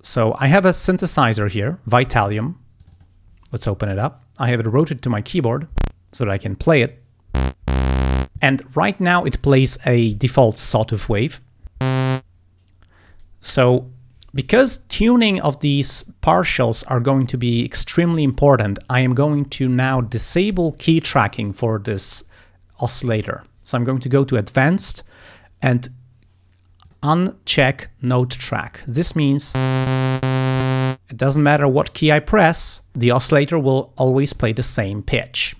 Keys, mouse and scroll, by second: 0.4 click, 1.5 scroll up 2, 2.8 click, 24.7 click, 26.9 click, 34.3 click.